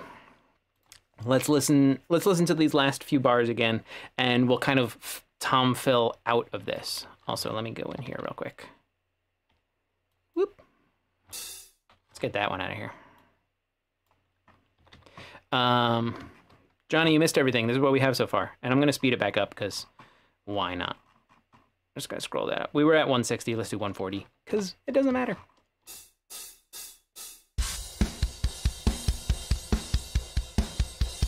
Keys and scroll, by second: 7.9 typing, 9.5 w, 11.8 Delete, 14.8 typing, 17.0 ,, 24.5 /, 25.9 space.